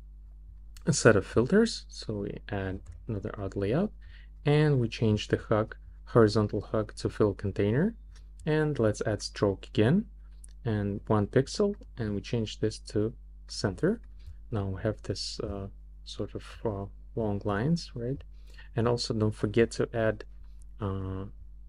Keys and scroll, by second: 2.7 shift+a.